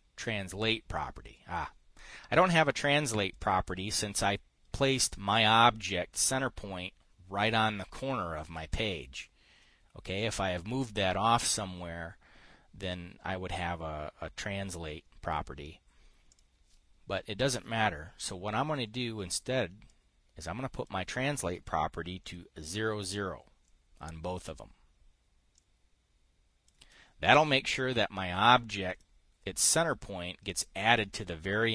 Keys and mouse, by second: 1.1 click, 3.8 click, 5.4 click, 16.8 click, 20.4-21.4 drag, 22.7 KP_0, 26.0-27.3 drag, 27.3 KP_0, 29.4 click.